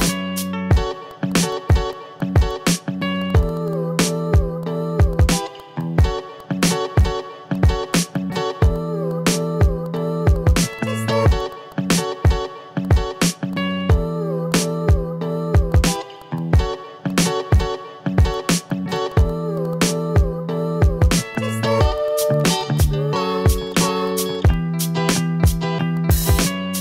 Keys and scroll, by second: 2.1 ctrl+z, 5.4 ctrl+z, 6.3 v, 14.4 ctrl+z, 15.6 a, 16.9 ctrl+z, 18.6 ctrl+z, 20.9 v, 25.0 Right, 25.6 ctrl+z.